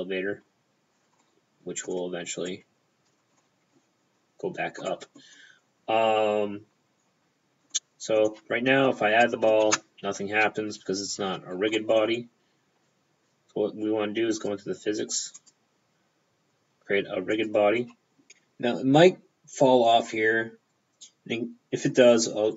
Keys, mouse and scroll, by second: 1.3 middle click, 2.5 click, 3.5 middle click, 4.9 middle click, 6.2-7.8 scroll down 1, 7.8 middle click, 7.8 scroll down 1, 9.3 middle click, 9.7 p, 10.8 middle click, 10.8 p, 11.3-11.8 scroll up 2, 11.8 middle click, 12.9 click, 14.4 click, 15.4 click, 17.4 click, 18.3 middle click, 18.3 right click.